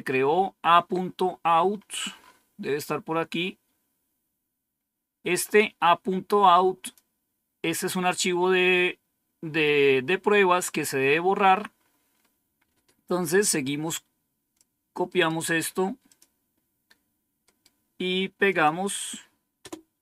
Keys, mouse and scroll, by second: 1.6-5.5 scroll up 2, 5.5-7.0 drag, 11.0-12.7 scroll down 3, 13.2-14.5 drag, 15.2 right click, 16.0 click, 17.3 right click, 18.4 click, 19.2 click, 19.5 Return.